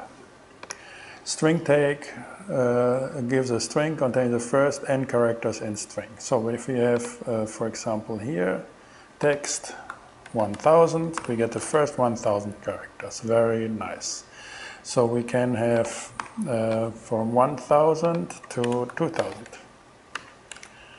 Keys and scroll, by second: 9.9 |, 10.3 0, 10.9 alt+0, 11.2 alt+6, 11.8 alt+shift+Return, 12.5 shift+Return, 16.2 alt+8, 18.3-19.7 typing, 19.9 alt+0, 20.2 alt+9, 20.8 alt+shift+Return.